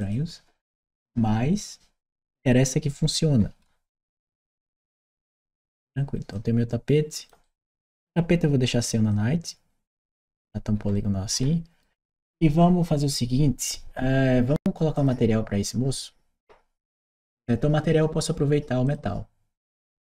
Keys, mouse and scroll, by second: 1.8-4.5 right drag, 6.1 click, 7.2 right click, 8.9 click, 10.1-11.6 right drag, 14.8 click, 18.7 click.